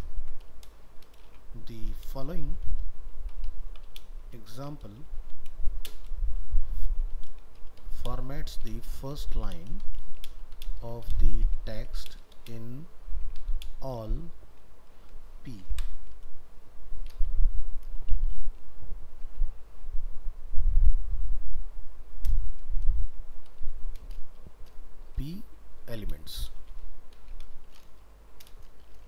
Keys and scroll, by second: 15.7 alt+1, 22.5 ctrl+v.